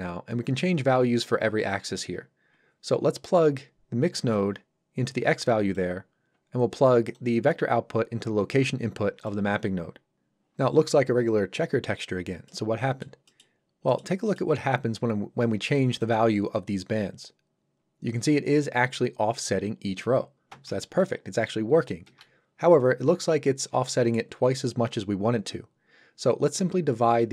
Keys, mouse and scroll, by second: 4.3 click, 12.5 middle click, 13.6 scroll up 1, 13.9 middle click, 16.0 click, 26.4-27.3 scroll down 1.